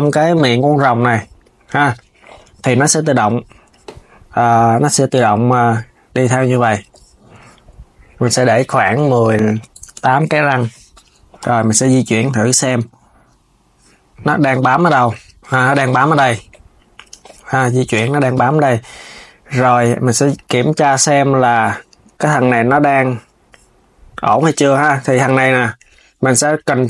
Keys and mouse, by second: 5.1-10.9 drag, 11.0 KP_3, 12.4 g, 16.8 z, 17.6 KP_3, 18.4 click, 20.0 click, 25.4 click.